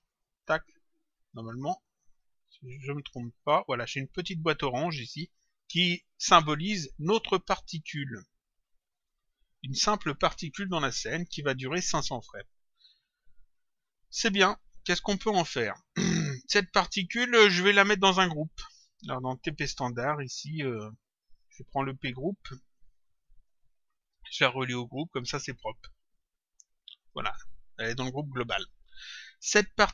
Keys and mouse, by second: 0.0 click, 1.1 click, 8.9 click, 16.5 click, 19.2 click, 22.8 click, 24.3 click, 26.0 click.